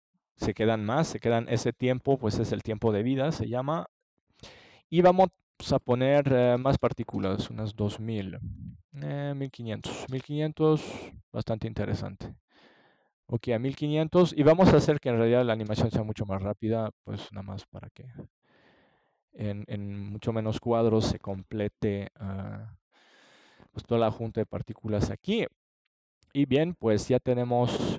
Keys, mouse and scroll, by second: 3.2-4.3 middle drag, 6.1-7.9 drag, 15.3-17.2 middle drag, 18.4-19.7 middle drag, 19.7 click, 20.9-22.1 drag, 22.1-23.9 middle drag, 23.9 click.